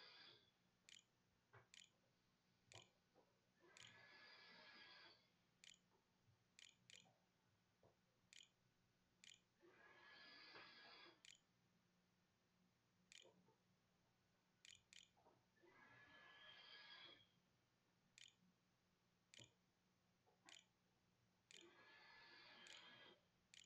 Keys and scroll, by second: 0.0-11.1 typing, 12.9 Return, 14.4 /, 15.5 h, 17.3-23.6 typing.